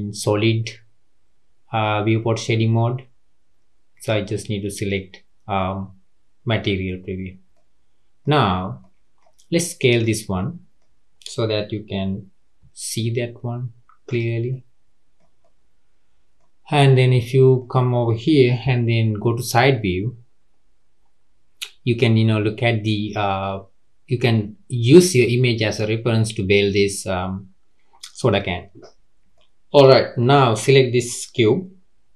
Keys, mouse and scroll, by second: 4.4 click, 7.1-7.5 scroll up 2, 7.5-8.4 middle drag, 8.4-8.8 scroll down 2, 8.8-9.8 middle drag, 9.8 click, 10.3-12.6 middle drag, 12.6 s, 14.5-18.6 middle drag, 18.6 KP_3, 29.3-30.2 middle drag, 30.2 click.